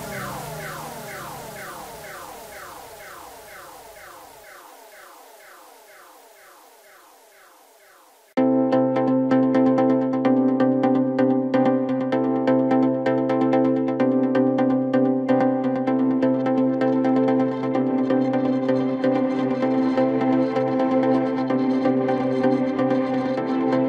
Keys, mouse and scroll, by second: 0.5-1.0 scroll up 2, 1.0-2.3 middle drag, 2.3 click, 2.6-3.2 scroll down 1, 3.2 KP_1, 5.3 KP_2, 5.5-5.9 KP_2, 6.6-7.1 scroll up 2, 7.1 Tab, 7.6-10.0 scroll up 2, 10.0 click, 10.9 1, 11.6 click, 12.6 g, 14.4 Tab, 15.5 click, 15.9-16.9 scroll down 2, 16.9-17.7 scroll up 1, 17.7 s, 21.0-21.7 scroll up 2, 21.7 g.